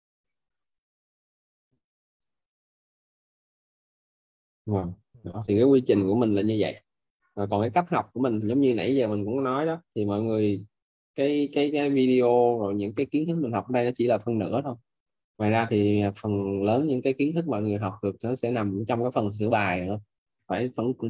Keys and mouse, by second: 14.1 click, 16.5 click.